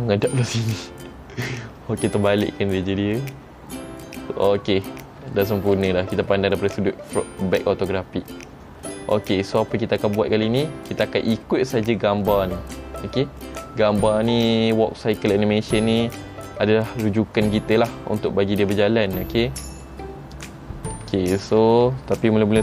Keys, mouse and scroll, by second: 2.2 click, 4.9 scroll down 2, 5.5 shift+middle click, 8.4-8.9 scroll up 2, 8.9 scroll down 1, 11.5-12.0 scroll down 1, 19.5 middle click, 20.2-21.2 scroll up 5, 21.3 shift+middle click, 21.3-22.0 scroll up 1.